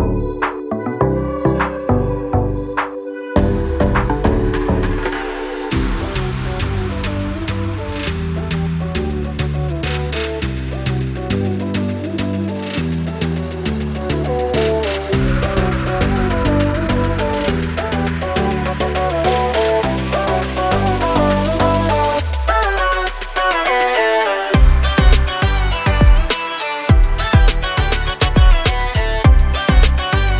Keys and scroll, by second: 0.4 space, 0.7 Escape, 4.4 e, 11.2 space, 11.8 p, 13.1 9, 13.4 5, 13.6 Return, 16.1 1, 16.3 5, 16.6 Return, 19.8-21.2 typing, 21.5 Escape.